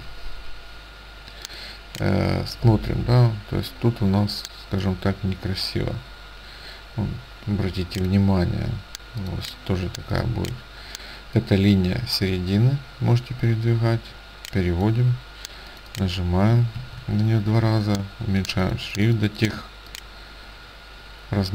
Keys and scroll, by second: 16.9 ctrl+a.